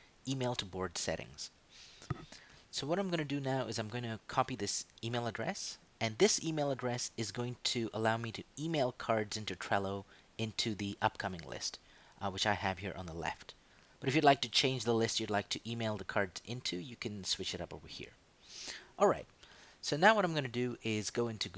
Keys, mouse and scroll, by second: 1.5 click, 5.1 ctrl+c, 15.5 click, 18.2 click, 20.0 click.